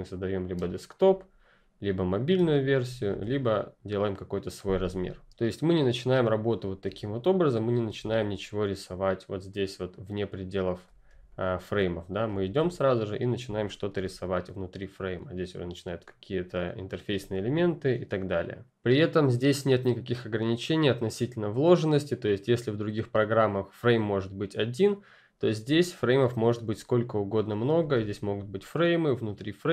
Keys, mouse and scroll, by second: 0.5 space, 0.7 click, 2.3 space, 2.5 click, 3.1 a, 3.4 click, 5.8 click, 6.5-6.8 scroll up 1, 6.8 r, 7.2 click, 11.0 space, 11.3 click, 11.6 space, 12.5 ctrl+space, 13.5 scroll up 1, 13.9 r, 14.4 click, 25.7 click, 27.2 click, 27.8 r, 28.0 click.